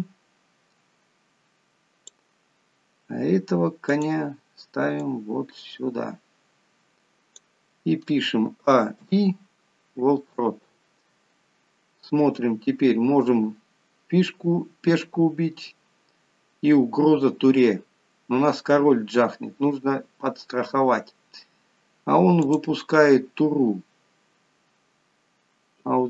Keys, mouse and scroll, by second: 0.3 click, 4.2 click, 5.3 click, 9.0 a, 9.4 i, 11.5 scroll down 2, 13.8-14.5 scroll up 2, 14.9-16.0 scroll down 1, 20.6 scroll down 2, 21.4 scroll up 2, 22.8 click, 24.6-25.2 scroll down 1.